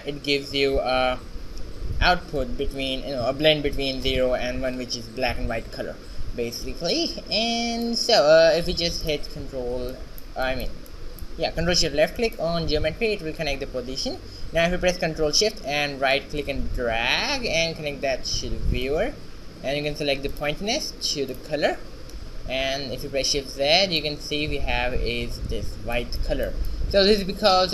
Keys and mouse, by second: 9.0 click, 10.0-11.1 middle drag, 16.2-18.1 right drag, 23.4 shift+z.